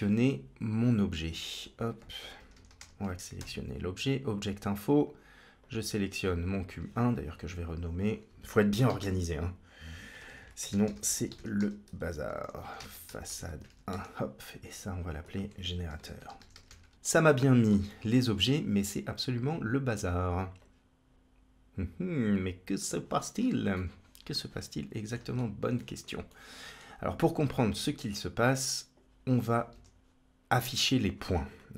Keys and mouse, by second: 5.4-6.5 drag, 7.9-14.3 drag, 10.1 BackSpace, 10.2 BackSpace, 14.8 click, 15.1-16.9 drag, 16.9 middle click, 17.3 shift+middle click, 17.7 middle click, 19.4 click, 20.5-22.9 drag, 23.7-25.0 middle drag, 25.6-25.9 shift+middle drag, 26.3 middle click, 28.1 click, 29.5 shift+a.